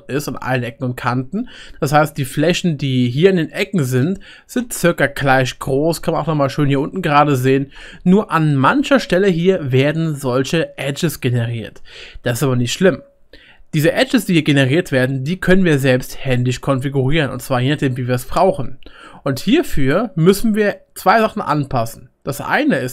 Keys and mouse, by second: 3.2-12.6 middle drag, 6.8-8.1 shift+right drag, 12.6-22.9 right drag, 20.6-22.9 middle drag.